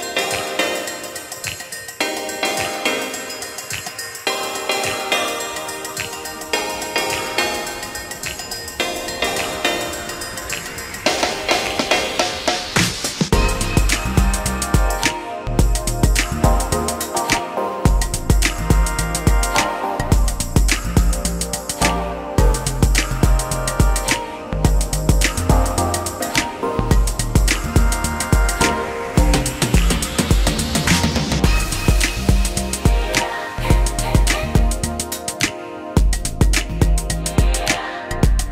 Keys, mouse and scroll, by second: 7.4 shift+click, 11.9 shift+Escape, 12.7 space, 15.5 Delete, 22.8 ctrl+click, 23.9 m, 32.7 shift+click, 33.0 shift+space, 34.0 space, 34.7 ctrl+z.